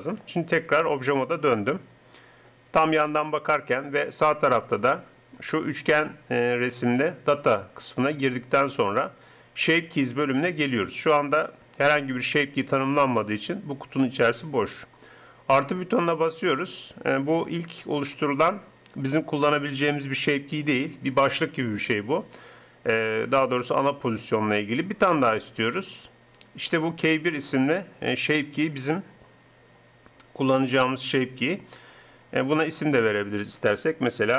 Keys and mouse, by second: 0.2 Tab, 3.0 KP_3, 17.4-18.6 middle drag, 25.6-27.4 drag, 32.4-34.3 drag.